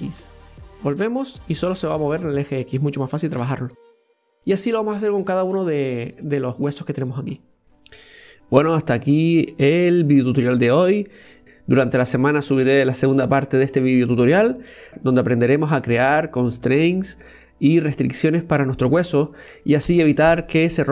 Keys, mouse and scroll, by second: 1.0 g, 4.6 ctrl+z, 5.2-7.3 middle drag, 7.3-8.7 scroll up 3, 8.0 middle click, 8.7 right click, 9.0-9.5 scroll down 2, 9.5-11.6 middle drag, 11.6 right click, 12.8-15.8 drag, 15.8-18.8 right drag.